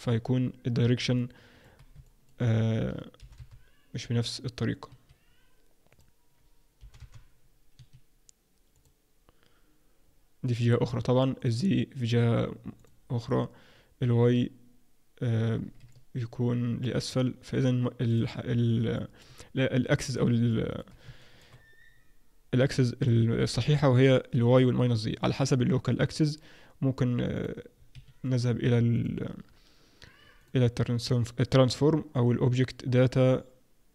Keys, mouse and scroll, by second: 0.0-1.0 scroll down 8, 1.2 middle click, 2.0 shift+middle click, 3.2 g, 5.9 click, 6.8 g, 8.7 click, 10.0-10.8 scroll down 2, 11.4 click, 12.8 click, 15.5-15.9 scroll down 2, 15.9 middle click, 18.0 click, 18.9 middle click, 19.6-20.4 scroll down 1, 20.4 scroll down 1, 20.4 middle click, 21.2 shift+middle click, 27.3 click, 28.9 click, 30.4 click.